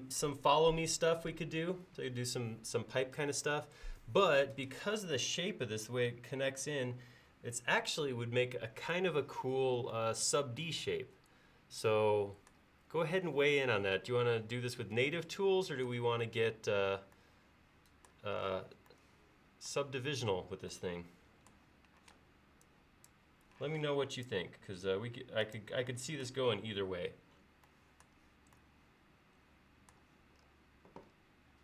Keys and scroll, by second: 22.1 space, 23.7 m.